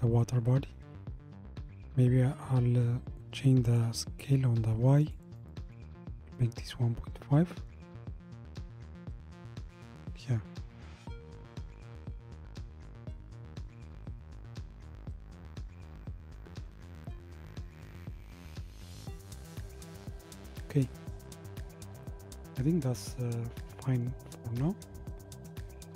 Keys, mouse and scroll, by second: 3.7-9.7 drag, 10.6-12.0 scroll up 1, 12.0 scroll up 1, 22.0-22.5 drag, 25.6 KP_0.